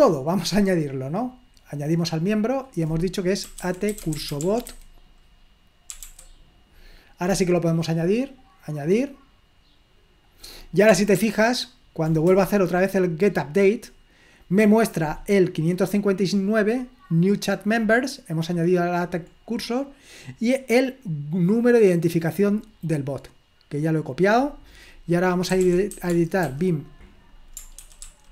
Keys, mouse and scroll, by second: 0.0 click, 1.7 click, 3.2-6.0 typing, 7.9 click, 8.9 click, 10.2 click, 11.2 ctrl+p, 12.3 Return, 15.9-17.1 drag, 17.6-19.8 drag, 20.6-23.0 drag, 24.0 click, 25.3-26.4 typing, 27.9 ctrl+w, 28.1 ctrl+w, 28.2-28.3 typing.